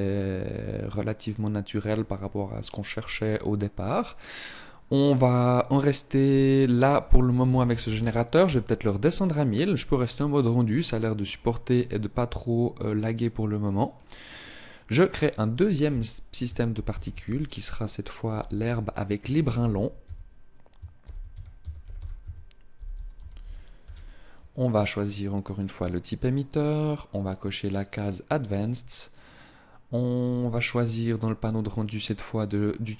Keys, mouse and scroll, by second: 6.3 click, 13.3 click, 24.7 click, 32.4 click.